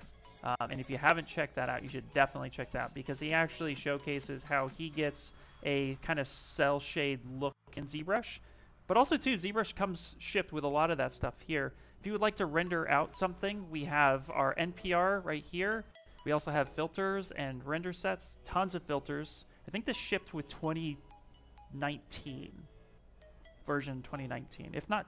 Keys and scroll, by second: 2.3 s, 8.6 ,.